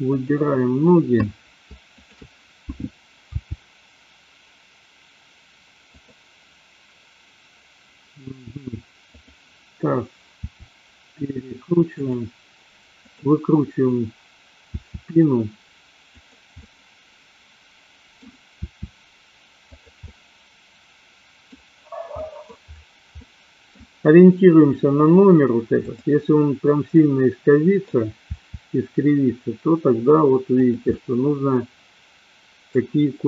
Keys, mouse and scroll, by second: 0.1-0.9 drag, 2.0 shift+click, 3.2 g, 10.5 r, 12.1 click, 13.0-13.6 drag, 14.9 r, 16.2 click, 16.6-18.2 middle drag, 18.7 r, 20.1-21.5 middle drag, 22.2-22.6 middle drag, 23.2-23.7 middle drag, 25.7-26.6 drag, 27.0-27.9 middle drag, 28.4 r, 31.0-32.9 middle drag.